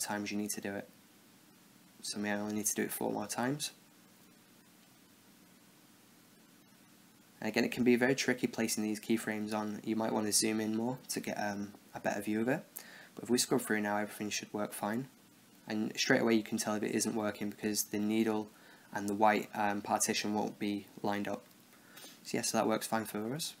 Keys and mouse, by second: 0.6 shift+d, 4.0 shift+d, 11.1-13.0 drag, 13.0 middle click, 13.9-15.8 drag.